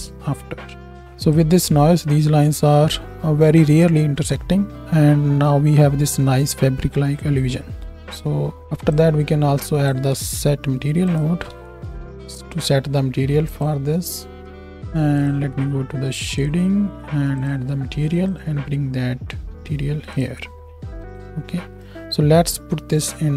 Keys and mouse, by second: 8.1-13.9 drag, 10.1 shift+a, 13.9 middle click, 14.6 ctrl+s, 14.6-15.1 middle drag, 15.1 click, 15.3-16.3 middle drag, 16.3-17.5 drag, 17.5-19.0 middle drag, 19.0-21.0 drag, 21.7 middle drag, 21.8-23.3 right drag.